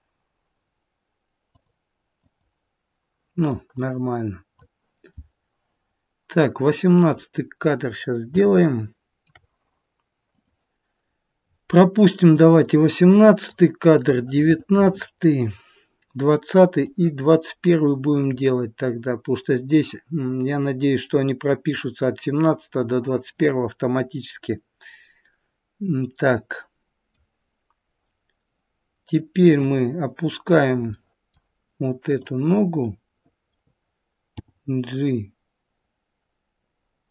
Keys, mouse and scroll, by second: 1.4 click, 2.1 click, 7.1-7.5 scroll up 1, 8.3 shift+middle click, 8.3-10.2 scroll up 2, 10.2 click, 11.4-12.6 scroll down 4, 12.6-13.5 scroll up 1, 13.5-14.5 scroll up 5, 13.9 middle click, 16.8 click, 24.1 middle click, 29.4 click, 30.8 middle click, 32.0 click, 32.7 middle click, 34.4 g.